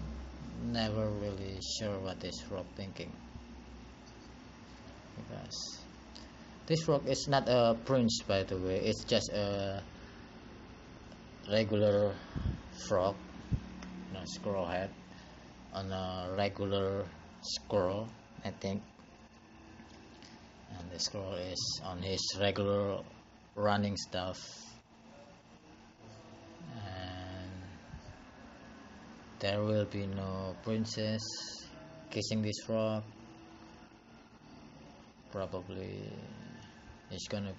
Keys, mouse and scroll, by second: 0.9 click, 2.3 click, 19.0 scroll down 3, 19.7-21.5 scroll up 3, 24.5 click, 26.2 click, 26.9 shift+middle click.